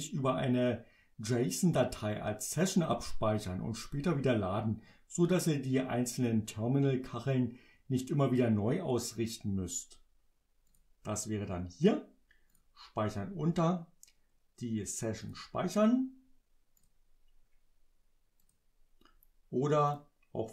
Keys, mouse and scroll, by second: 10.7 click, 12.6 click, 15.3 click, 16.8 click, 18.5 click, 19.9 click.